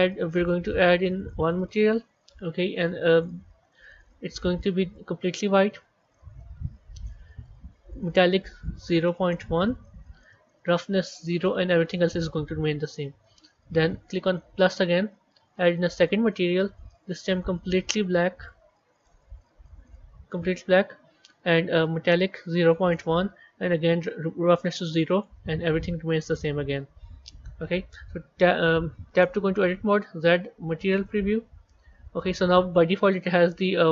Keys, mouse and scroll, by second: 0.3-3.1 drag, 6.4-7.9 scroll down 5, 7.9-11.6 drag, 11.6-12.3 scroll down 1, 12.3-12.7 scroll down 6, 12.7-14.4 scroll up 17, 14.4-17.0 drag, 20.5-21.1 scroll down 1, 21.1-21.6 scroll down 3, 21.6-25.5 drag, 25.5-26.2 scroll down 8, 26.2-29.1 scroll up 23, 29.1 b.